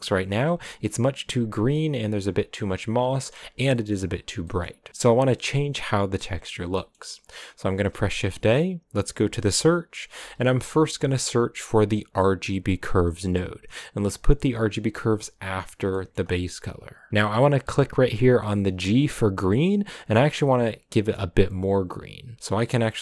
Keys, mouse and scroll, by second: 0.2-1.8 scroll up 1, 15.6 click, 16.2 middle click, 16.8 click.